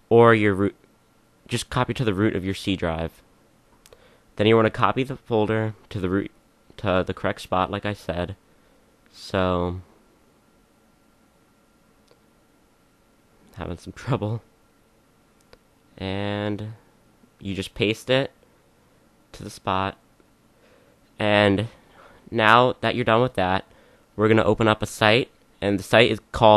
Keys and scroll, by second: 3.4 c.